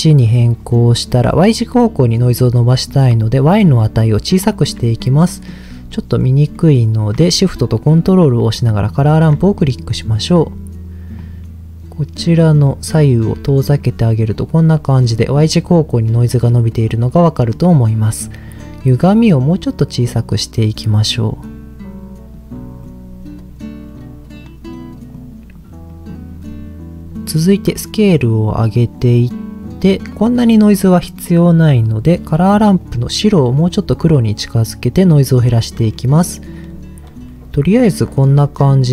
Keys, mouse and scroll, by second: 3.3-4.5 shift+drag, 5.3 middle click, 5.9 middle click, 6.5 middle click, 8.9 ctrl+shift+click, 9.5 middle click, 9.9-10.6 scroll up 2, 11.1-12.6 drag, 12.9 click, 14.3 middle click, 14.5-15.2 scroll down 2, 16.3 middle click, 17.3 middle click, 18.9-22.3 drag, 22.8-24.1 drag, 25.1 click, 25.9 middle click, 26.3-26.9 scroll up 3, 27.7-29.0 drag, 27.7 scroll up 1, 32.8-35.1 drag, 35.9 middle click, 37.3-38.3 middle drag, 38.5-38.9 scroll down 6.